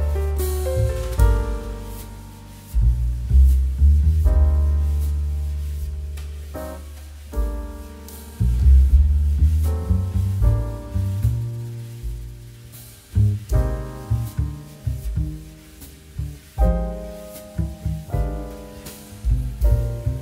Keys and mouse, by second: 0.2 click, 2.3 middle click, 3.2 click, 9.2 click, 13.4 click.